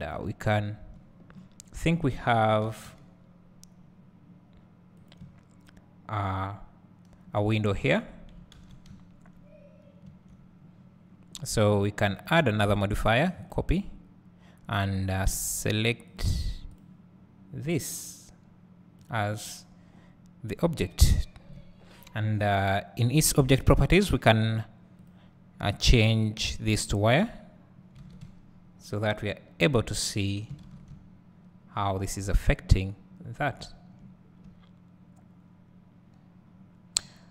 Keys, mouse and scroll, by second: 0.2-0.9 drag, 1.4 middle click, 5.4-5.9 drag, 6.6 click, 8.2 middle click, 8.3 click, 16.3 click, 27.6 click, 28.1 alt+a, 28.3 `, 29.6-30.2 drag, 32.5-33.3 scroll up 2, 33.3 scroll down 2, 33.5-37.3 drag, 33.9 `.